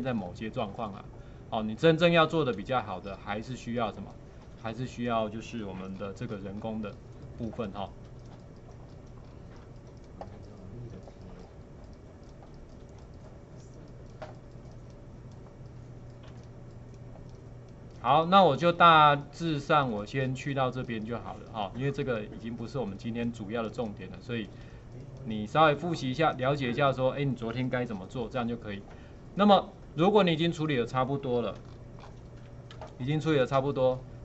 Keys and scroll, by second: 7.5 alt+space, 8.7 alt+space, 16.4 space, 18.8 space, 19.1 space, 23.8 space, 32.7 alt+space.